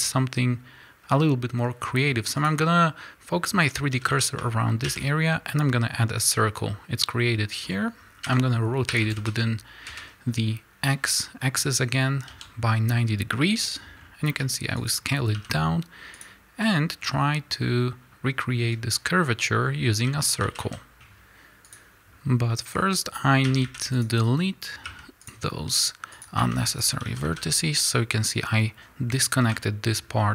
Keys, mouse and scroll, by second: 2.4 shift+s, 3.8 a, 6.2 shift+a, 8.2 r, 10.4 KP_Enter, 11.3 scroll down 1, 12.2 s, 13.9 scroll up 1, 14.2 s, 15.3 g, 16.1 click, 18.5 scroll down 1, 20.0 a, 21.6 KP_Enter, 21.8 click, 22.2 scroll up 1, 23.4 a, 23.9 click, 25.2 x, 26.1 click, 26.7 x, 27.0 a, 29.4 l.